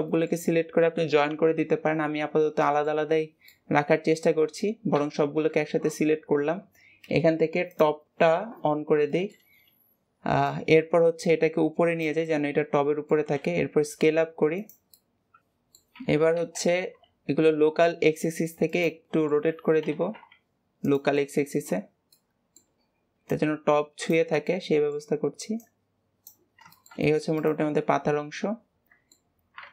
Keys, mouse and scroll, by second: 0.1-2.3 middle drag, 2.3-2.6 scroll down 2, 2.6-3.0 middle drag, 3.0-3.4 scroll up 3, 3.4-4.9 middle drag, 4.9 a, 6.1-7.7 scroll down 14, 7.7 click, 8.6-9.1 scroll down 3, 9.1-10.3 middle drag, 10.3 click, 12.2-13.3 middle drag, 13.3 s, 14.9-15.9 middle drag, 15.9 r, 19.0 middle click, 19.4 r, 21.1-23.2 middle drag, 23.2 click, 24.3-25.5 middle drag, 25.5 click, 26.5 scroll down 2, 26.6 shift+middle click, 27.3 click, 27.7-29.7 middle drag.